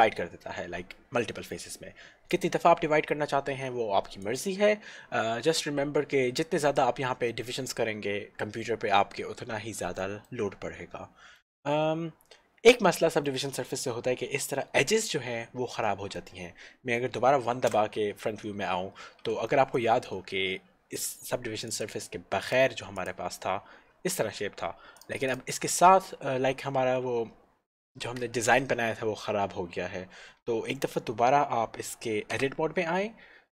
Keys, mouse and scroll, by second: 4.4 click, 10.0 middle click, 15.9 middle click, 17.7 KP_1, 19.1 scroll up 1, 19.6 shift+middle click, 21.7 click, 22.0 click, 25.5 click, 32.4 Tab.